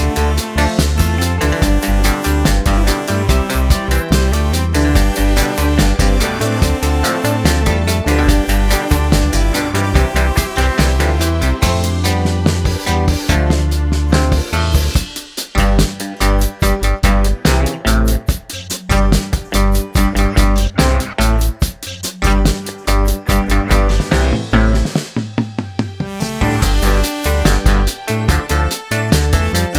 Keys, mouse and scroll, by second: 1.0 click, 1.5 right click, 1.7 click, 1.7 right click, 2.6 click, 2.6 right click, 3.2 middle click, 3.5 r, 4.7 middle click, 4.9 scroll down 1, 5.0 middle click, 5.5 click, 7.6 scroll up 1, 7.7 middle click, 8.2-8.6 scroll down 1, 8.6 r, 9.5 middle click, 9.7-10.4 scroll down 1, 10.4-12.1 middle drag, 12.1 scroll up 1, 12.3 middle click, 13.0 click, 13.6 g, 14.6 middle click, 14.7 scroll up 1, 14.9 shift+middle click, 15.8 g, 16.2 middle click, 16.6 click, 16.7 middle click, 17.5-17.9 scroll down 2, 17.6 middle click, 17.9 middle click, 18.2 scroll up 1, 18.4-19.5 middle drag, 19.5 click, 19.9 click, 21.3 click, 21.6 middle click, 21.8-22.2 scroll down 1, 22.2 shift+click, 22.4 shift+click, 24.5 shift+click, 25.6 ctrl+l, 26.3 click.